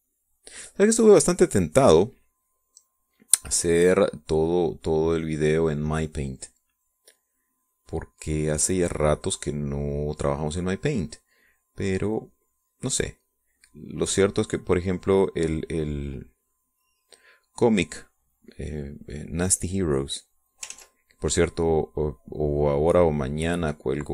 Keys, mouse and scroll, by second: 3.1-6.3 drag, 6.3 middle click, 7.4-11.1 drag, 11.8-13.0 drag, 13.3 middle click, 14.3-18.0 drag, 18.2 middle click, 19.9-21.4 drag, 21.5 ctrl+z, 22.2-24.1 drag.